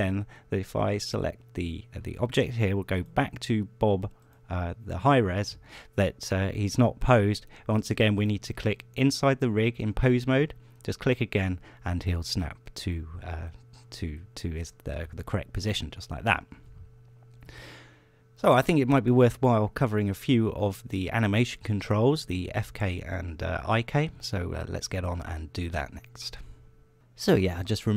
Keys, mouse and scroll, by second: 0.0 right click, 14.3 scroll down 1, 14.6 scroll up 1.